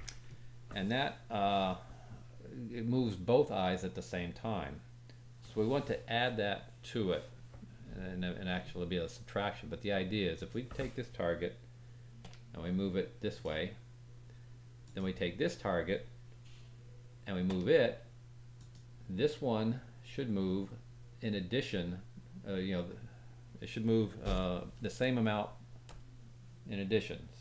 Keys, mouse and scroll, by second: 10.3 click, 12.2 g, 14.8 click, 17.5-25.9 drag, 17.5 g.